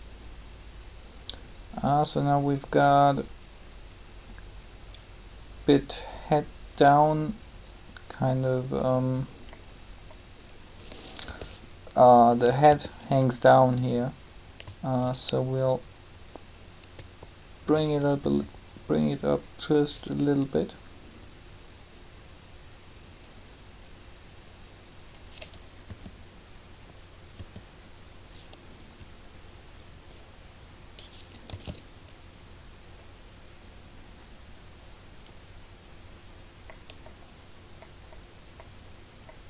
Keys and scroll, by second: 11.2 b, 17.7-18.2 typing, 25.9 r, 31.5 alt+a.